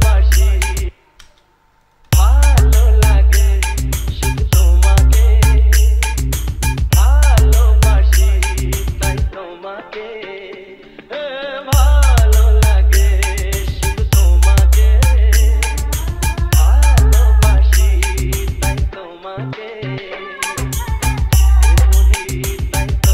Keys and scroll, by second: 1.0 space.